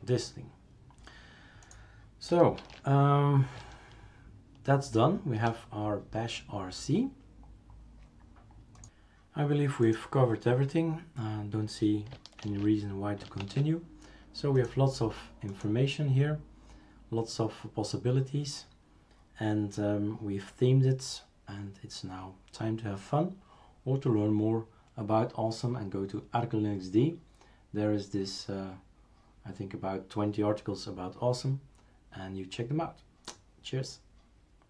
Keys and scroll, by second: 2.6 shift+super+q, 12.4 shift+super+q, 13.4 shift+super+q.